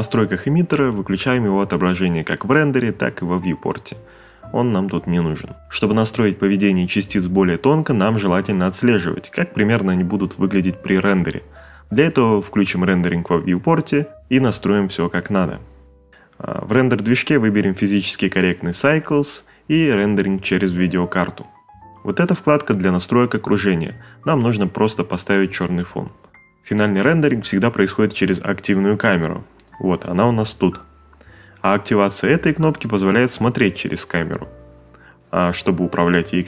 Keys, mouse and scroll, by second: 5.7 space, 7.6 space, 25.8 middle click, 31.7 ctrl+middle click, 34.5 click, 36.2 click.